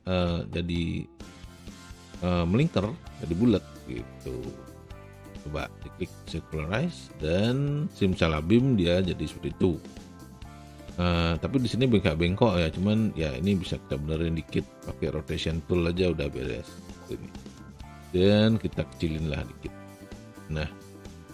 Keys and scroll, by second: 12.6 e, 18.0 r.